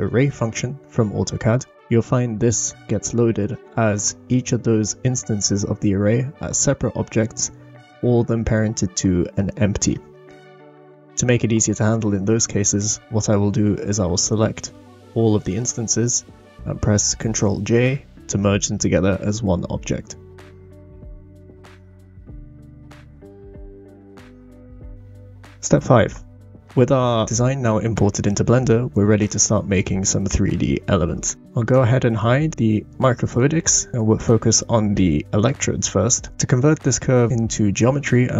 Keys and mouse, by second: 0.1 shift+middle drag, 0.6 shift+middle click, 1.2 click, 2.2 shift+drag, 6.9 click, 7.7 click, 8.5 click, 9.9 Down, 10.1 Down, 10.2 Down, 10.3 Down, 10.5 Down, 10.6 Down, 10.7-11.9 Down, 13.7 click, 14.7 shift+click, 16.5 ctrl+j, 17.6 middle click, 18.7 middle click, 19.2-19.6 middle drag, 20.3 click, 21.1-21.6 middle drag, 22.2 g, 23.6 middle click, 26.6-27.0 shift+middle drag, 27.2-27.7 drag, 31.7 click, 32.9 click, 34.9-35.5 middle drag.